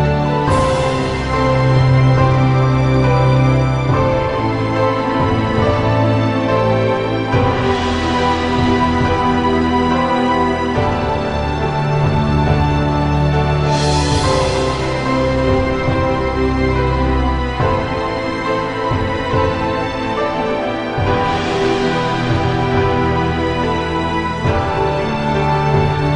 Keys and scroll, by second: 14.6 -, 14.7 +, 18.6 -, 20.9 -, 21.3 -, 23.1 b, 24.4 i.